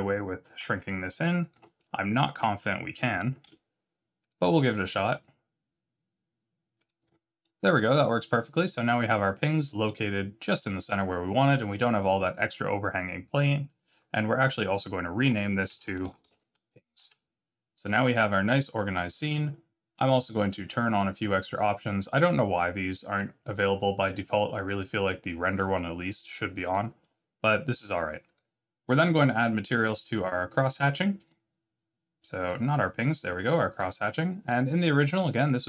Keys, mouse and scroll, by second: 0.5 2, 1.4 alt+click, 3.4 shift+g, 4.7 s, 7.0 Tab, 8.0 scroll up 3, 15.2 F2, 19.2 click, 21.4 click, 26.8 middle click, 27.8-28.2 scroll up 1, 28.2 click, 29.7 click, 30.7 click, 32.3 click, 33.6 click, 34.4 click.